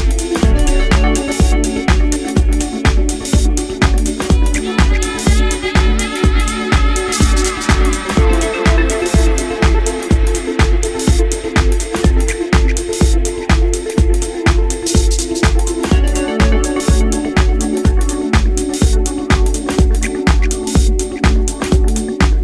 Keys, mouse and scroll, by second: 0.3-0.9 scroll down 3, 0.9 middle click, 1.6-2.5 scroll down 2, 2.5 shift+middle click, 3.3 scroll up 1, 8.3 click, 17.6 Return.